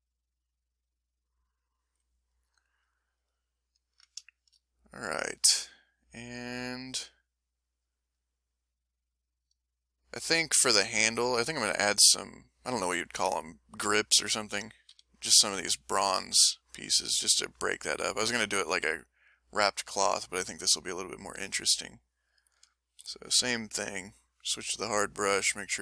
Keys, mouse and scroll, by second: 0.1 click, 0.5 click, 0.9 click, 2.4 ctrl+middle click, 3.3-4.1 ctrl+scroll up 2, 3.4 ctrl+middle click, 4.3-5.5 ctrl+shift+middle drag, 5.5 click, 8.0 ctrl+click, 8.3-10.7 ctrl+middle drag, 14.9 s, 19.5 middle click, 21.4 click, 21.8 click, 23.0 e, 23.7 click.